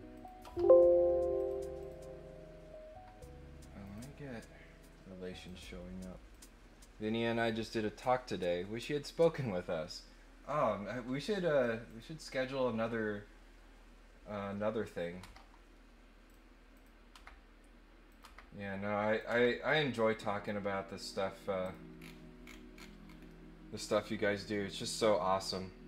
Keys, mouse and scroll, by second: 0.1 click, 0.4 Delete, 1.3 click, 1.8 click, 3.8 click, 5.3 click, 6.3 click, 11.8 click, 15.1 Delete, 16.2 click, 16.7 click, 18.1 click, 18.1 Delete, 19.1 click, 19.3 Delete, 19.9 click, 21.6 click, 22.0-23.1 scroll down 8, 23.2-24.5 middle drag, 25.3 middle click.